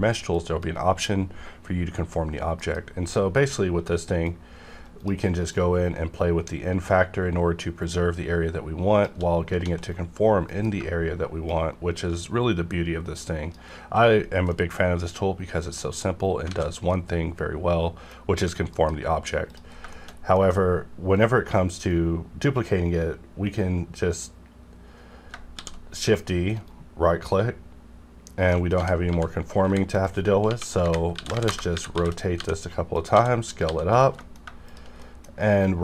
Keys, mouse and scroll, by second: 0.3 click, 2.6 F9, 4.2 shift+click, 4.8 shift+right click, 5.5-8.9 shift+drag, 8.9 shift+right click, 10.5 F9, 11.5-14.5 shift+drag, 14.5-16.5 middle drag, 16.5 alt+a, 16.9-18.7 middle drag, 18.7 F9, 19.5 click, 19.7 scroll down 1, 19.9 shift+middle click, 21.8 right click, 25.3 right click, 25.5 shift+d, 25.9 right click, 28.7-33.6 typing, 29.9 click, 31.5 KP_Enter, 32.9 click, 33.5 click, 33.9 click, 34.2 shift+middle click, 34.2 shift+middle click, 34.7 click, 35.0 middle click, 35.5 right click, 35.5 right click.